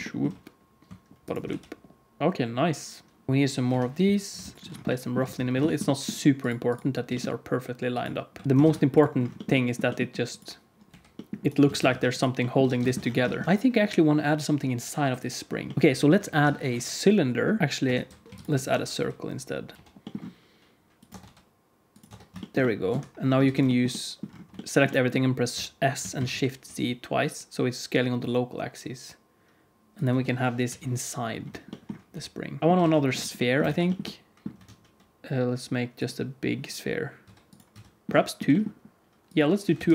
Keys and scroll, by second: 0.2 r, 1.4 g, 2.2 Tab, 2.2 alt+z, 2.2 alt+a, 2.2 ctrl+s, 3.3 ctrl+s, 3.6 KP_1, 4.3 shift+d, 4.5 ctrl+s, 4.5 z, 4.5 g, 5.1 alt+z, 7.0 g, 8.3 alt+z, 8.4 alt+z, 8.4 alt+a, 8.4 ctrl+s, 8.6 ctrl+s, 9.7 g, 10.8 g, 11.6 alt+a, 11.9 ctrl+s, 12.6 alt+a, 12.8 ctrl+s, 15.4 ctrl+super+s, 15.7 alt+shift+z, 16.3 shift+a, 17.6 Tab, 17.6 s, 17.6 g, 17.8 Tab, 18.2 x, 18.6 shift+a, 19.7 Tab, 19.7 KP_1, 19.7 KP_3, 19.7 a, 19.7 e, 21.0 Tab, 21.1 r, 22.0 Tab, 23.4 a, 25.5 s, 30.0 Tab, 30.6 KP_3, 32.0 r, 32.6 alt+a, 32.7 alt+a, 33.6 ctrl+s, 34.6 shift+a, 37.2 s, 37.6 s, 38.1 g, 39.7 KP_1.